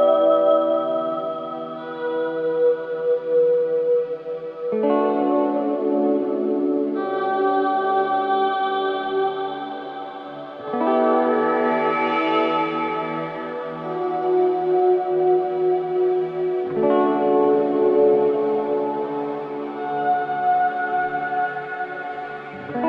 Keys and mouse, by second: 1.4 click, 2.5-3.3 drag, 3.7 i, 4.9 Right, 5.1 Right, 5.2 Right, 6.2-8.0 drag, 8.8 Right, 8.9 Right, 9.1 Right, 10.2-12.4 drag, 12.2-13.8 typing, 13.1-14.3 drag, 16.1-17.4 typing, 17.9-18.8 drag, 18.9 typing, 20.2 typing.